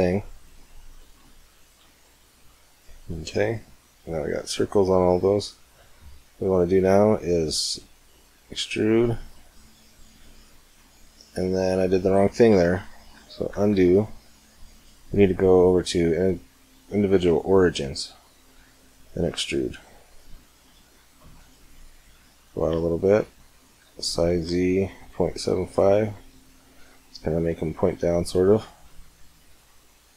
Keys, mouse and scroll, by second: 0.7-3.0 middle drag, 3.0 click, 3.6 middle click, 3.7 click, 4.1 click, 4.3 click, 4.6 middle click, 6.4-8.4 middle drag, 7.5 e, 13.3 ctrl+z, 14.2-14.6 middle drag, 15.3-17.2 drag, 19.0 e, 23.6 s, 27.2 middle click, 29.2 middle click, 29.4 middle click, 29.6 middle click.